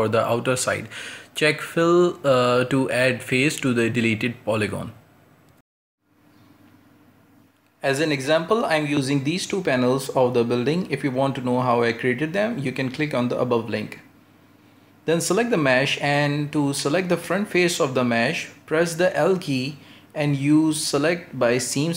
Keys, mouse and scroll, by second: 1.2-2.9 drag, 2.9 middle click, 3.6 Tab, 8.0 scroll down 1, 8.3-10.2 middle drag, 10.2-10.6 scroll up 1, 10.6 middle click, 11.1-12.4 scroll up 1, 12.4 right click, 14.8 /, 15.5-15.9 scroll down 1, 15.9 middle click, 16.2 Tab, 16.7-17.1 scroll up 1, 17.1-18.8 shift+middle drag, 18.8 click, 19.3 right click, 20.1-21.5 scroll down 1, 21.5 ;.